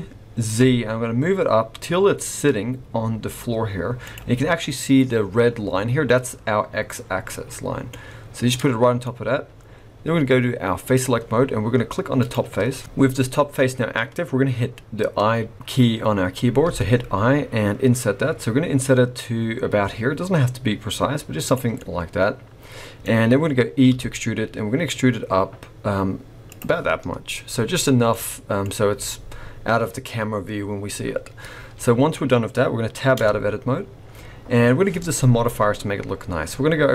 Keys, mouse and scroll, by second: 7.5-7.9 scroll down 2, 7.9 middle click, 9.0-9.6 scroll up 2, 10.9 click, 12.1 click, 21.8 middle click, 23.3-23.9 scroll down 1, 23.9 scroll down 2, 23.9 e, 26.7-27.1 scroll down 6, 28.1 middle click, 28.7-30.0 scroll up 2, 31.2-32.3 scroll up 4, 32.3 scroll down 2, 33.2 Tab, 33.6-34.4 scroll up 1, 34.4-35.2 scroll up 1.